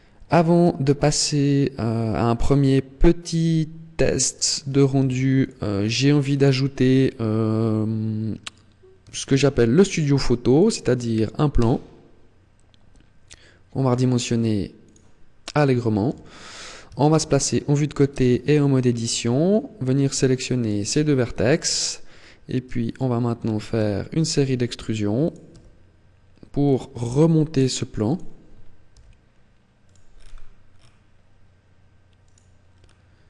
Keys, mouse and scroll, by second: 1.0 middle click, 4.8 ctrl+s, 5.6-6.4 scroll down 9, 6.2 scroll up 2, 6.4 scroll down 1, 9.0 shift+a, 11.3 s, 14.7 click, 15.8 KP_3, 16.8 shift+middle click, 18.0 Tab, 18.3-18.7 scroll up 3, 19.0 middle click, 19.8 right click, 20.4 shift+right click, 21.1 KP_3, 21.8-22.2 scroll down 3, 22.6 shift+middle click, 23.6 e, 25.2 click, 25.4 e, 26.7 click, 26.9 e, 28.0 click, 29.6 click, 32.0 right click, 32.4 scroll down 5.